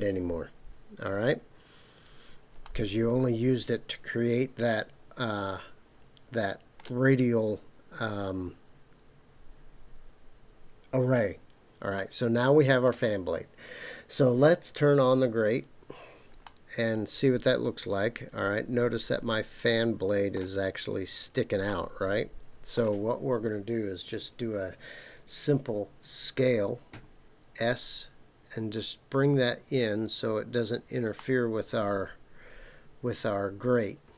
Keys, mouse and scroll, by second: 1.9 click, 2.6 middle click, 2.7 click, 2.8-4.5 middle drag, 4.5 click, 4.6-6.8 middle drag, 11.9-12.9 middle drag, 15.5 click, 16.4-18.2 middle drag, 18.2 click, 18.3-20.4 middle drag, 21.6-22.8 middle drag, 26.9 s, 30.5 click, 31.2-34.1 middle drag.